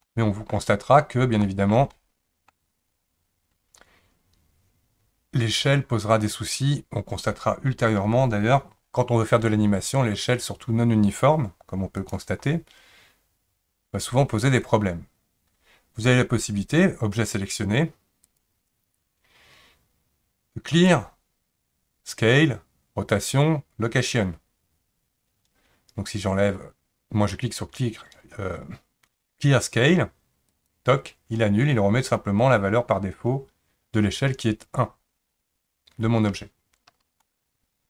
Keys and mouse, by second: 0.0-0.5 middle drag, 1.4 shift+middle drag, 1.9-2.5 middle drag, 12.0 click, 18.2-30.7 drag, 37.2-37.8 middle drag.